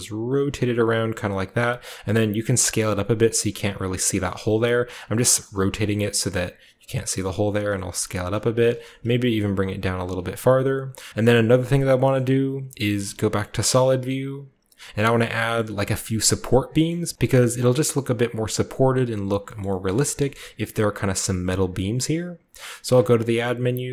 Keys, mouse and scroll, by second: 1.3 click, 2.2 s, 3.2 click, 5.1-6.8 typing, 5.3 click, 5.7 drag, 7.5 click, 7.9-8.7 typing, 8.0 click, 9.8 click, 10.1-11.1 drag, 10.1 typing, 10.2-11.1 scroll down 1, 11.1 typing, 12.8-13.5 typing, 15.5 shift+middle drag, 15.8-16.6 shift+middle drag, 16.7-17.1 shift+scroll up 1, 16.8 shift+middle click, 19.5 shift+middle click, 19.8 shift+middle drag, 20.1-22.8 shift+middle drag, 22.8 shift+a.